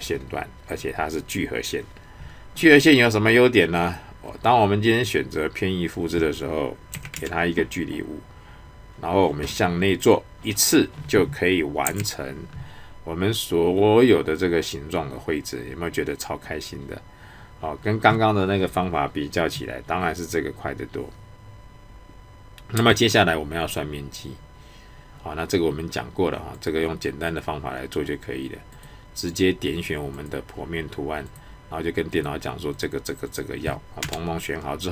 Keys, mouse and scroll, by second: 3.8 click, 10.0 click, 26.5 click, 28.7 click.